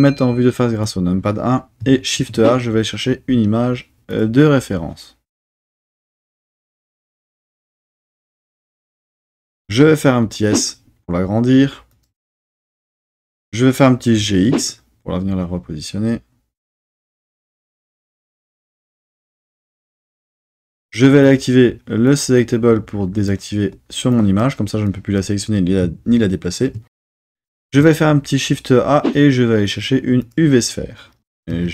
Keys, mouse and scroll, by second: 0.8 KP_1, 2.1 shift+a, 9.7 s, 11.9 click, 14.1 g, 14.4 x, 18.6 click, 21.2-22.4 drag, 23.1 click, 24.1 click, 24.8-25.2 drag, 27.6 shift+a, 31.2 g, 31.5 z.